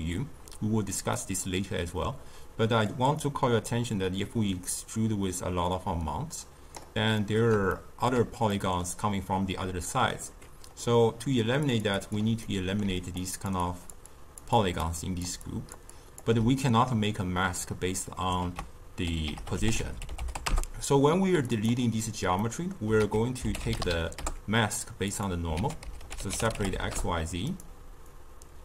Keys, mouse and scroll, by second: 1.1-2.8 middle drag, 2.8-6.1 drag, 7.1-11.6 middle drag, 11.6 click, 11.9 click, 12.4-12.8 middle drag, 12.8-16.2 typing, 13.1 click, 13.6 click, 14.0 click, 14.5 click, 14.9 click, 15.4 click, 15.9 click, 18.4 ctrl+a, 22.4-22.9 middle drag, 22.9 ctrl+a, 25.5 ctrl+a, 28.1-28.6 drag.